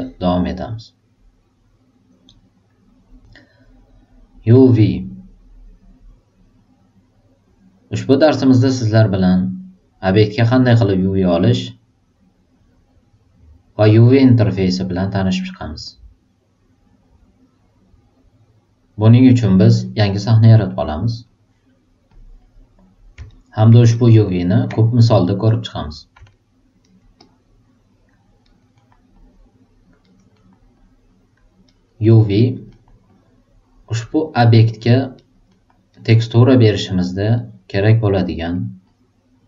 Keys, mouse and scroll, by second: 20.6 click, 21.2 click, 23.2 alt+right click, 23.9 alt+right click, 25.5 click, 26.3 alt+super+right click, 26.8 alt+super+right click, 27.2-28.2 alt+super+drag, 28.4 alt+super+right click, 28.7 alt+super+middle click, 29.1 alt+super+click, 30.0 alt+super+right click, 30.3 alt+super+middle click, 30.7 alt+super+click, 31.6 alt+super+right click, 32.0 alt+super+middle click, 32.3 alt+super+right click, 32.6 alt+middle click, 33.0-34.3 alt+drag, 34.4 alt+right click, 34.8 alt+middle click, 35.1 alt+right click, 35.4 alt+middle click, 35.9 alt+right click, 36.3 alt+click, 37.4 alt+right click, 37.7 alt+middle click, 38.0 alt+right click, 38.4 alt+middle click, 38.8 alt+click.